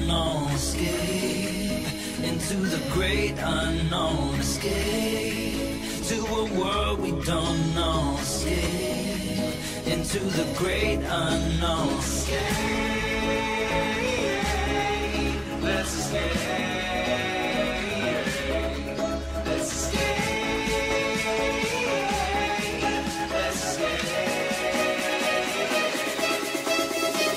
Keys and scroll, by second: 9.5 ctrl+shift+x, 24.2 ctrl+shift+x.